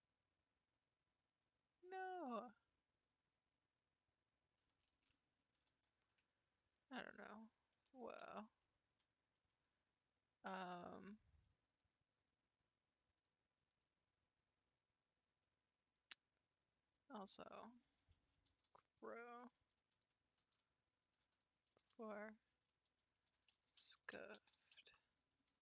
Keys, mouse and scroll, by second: 6.1 ctrl+z, 6.9-8.3 drag, 8.3 ctrl+z, 9.7 click, 10.6 click, 11.8 click, 13.2 click, 17.6-20.7 drag, 24.4 f.